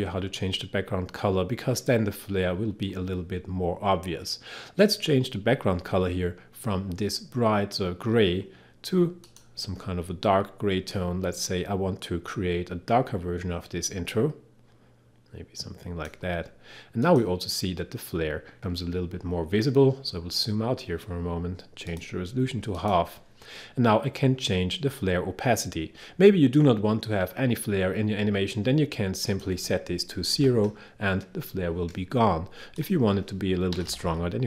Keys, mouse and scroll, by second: 9.3-17.1 drag, 20.3-21.0 scroll down 1, 22.0 click, 29.3 click, 30.4 0, 32.8 click, 33.5-34.4 typing.